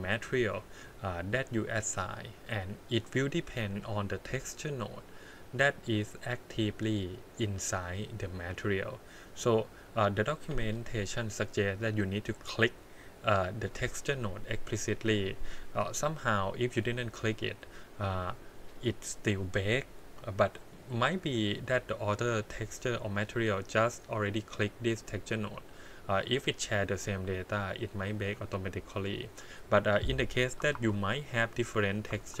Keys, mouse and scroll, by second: 1.7-2.0 scroll up 1, 2.9 click, 4.1 click, 4.5-9.1 drag, 9.2 click, 12.4 click, 17.0 click, 17.2 click, 23.6 click, 24.1-27.2 drag, 29.3 click, 29.8 click, 30.7 shift+d, 32.1 shift+d.